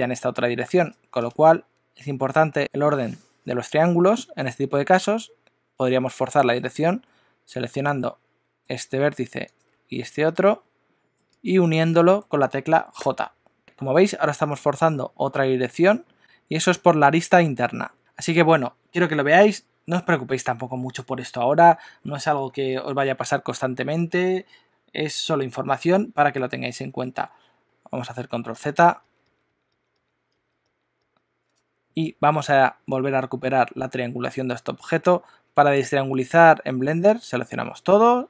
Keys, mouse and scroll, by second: 5.1 click, 7.0 middle click, 9.4 shift+click, 10.0 middle click, 11.5 shift+middle click, 12.0 middle click, 13.0 j, 16.2 middle click, 16.3 middle click, 28.8 super+z, 29.0 super+z, 29.2 super+z, 29.4 super+z, 29.7 super+z, 29.9 super+z, 30.4 super+z, 30.6 super+z, 37.8 a.